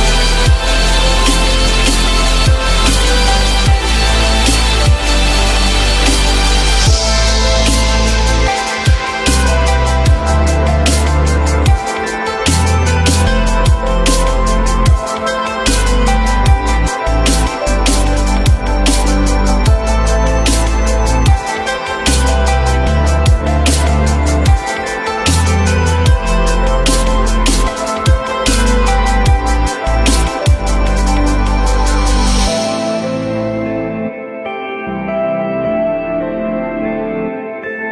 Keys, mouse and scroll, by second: 3.5 z, 6.0 ctrl+click, 12.6 q, 16.7 shift+click, 17.5 shift+click, 18.2 shift+click, 18.5 shift+double click, 18.6 shift+click, 18.8 shift+click, 18.9 shift+double click, 31.5 shift+click, 35.3 ctrl+z, 36.3 ctrl+click.